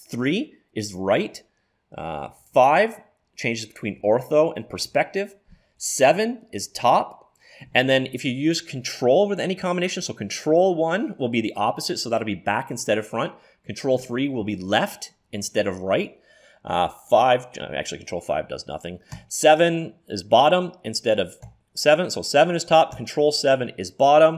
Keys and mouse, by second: 2.4 KP_5, 4.1 KP_5, 4.8 KP_5, 5.8 KP_7, 10.5 ctrl+KP_1, 13.7 ctrl+KP_3, 16.9 ctrl+KP_5, 19.2 ctrl+KP_7, 21.5 KP_7, 23.0 ctrl+KP_7.